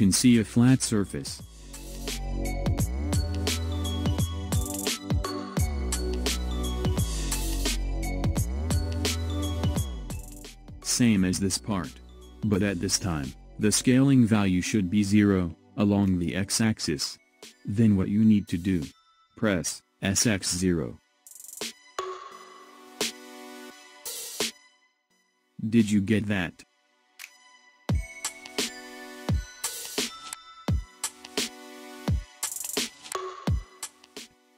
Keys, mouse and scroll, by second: 0.3-2.2 middle drag, 2.2 scroll up 2, 2.9 scroll down 2, 4.3-7.0 middle drag, 7.0 scroll down 1, 7.5-9.9 middle drag, 9.9 click, 12.1-15.2 middle drag, 17.6 scroll up 4, 18.6-21.1 shift+middle drag, 21.1 s, 27.8 scroll down 4, 32.6-34.5 middle drag.